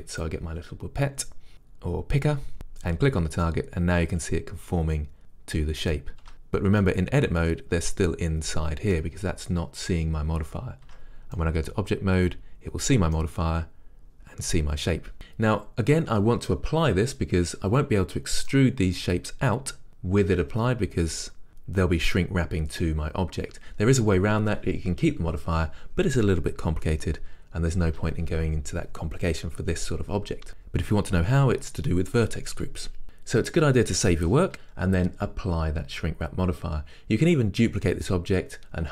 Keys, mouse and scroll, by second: 0.5 click, 3.6-38.9 middle drag, 6.3 Tab, 6.5-6.9 scroll up 2, 11.0 Tab.